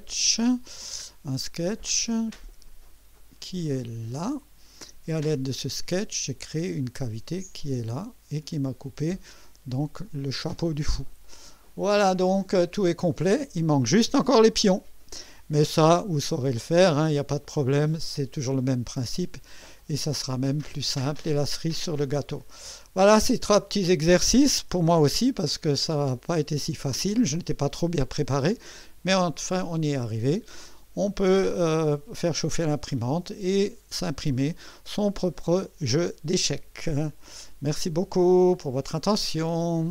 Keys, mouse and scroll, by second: 1.0 scroll up 2, 3.2 click, 3.7 click, 4.1 space, 5.3 click, 6.8 click, 7.2 space, 8.0 click, 10.0 click, 10.5 space, 11.2-13.7 drag, 18.6-19.5 right drag, 19.8-21.8 drag, 23.0 scroll up 1, 23.6-24.2 right drag, 24.5 KP_1, 25.2 KP_2, 26.0-26.9 right drag.